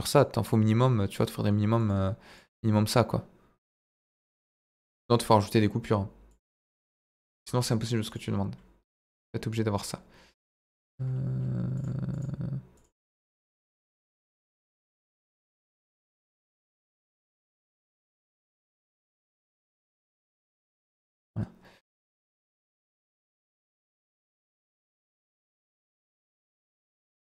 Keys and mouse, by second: 0.3 click, 1.8 click, 2.5 click, 3.8 click, 4.7 click, 6.3 click, 7.2 click, 8.0 click, 10.3 click, 11.7 click, 12.1 click, 12.7 click, 13.1 click, 14.0 click, 15.0 ctrl+z, 16.5 click, 16.9 click, 17.8 ctrl+z, 18.7 click, 19.0 click, 19.7 click, 22.4 Tab, 22.7 middle click, 22.9 Tab, 23.4 x, 24.1 Tab, 24.6 middle click, 25.6 ctrl+3, 26.3 click, 26.5 middle click.